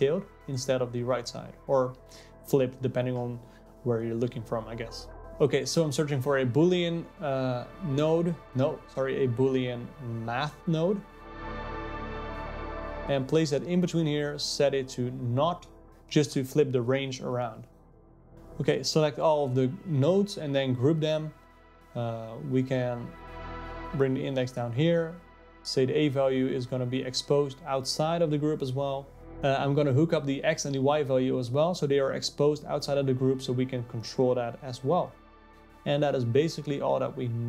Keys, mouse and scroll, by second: 4.7 click, 6.9 o, 14.2 click, 17.6 click, 18.3 click, 21.0 ctrl+g, 23.2 click, 23.7 click, 24.6 ctrl+z, 25.8 click, 32.2 click, 33.0 click, 34.7-37.4 drag.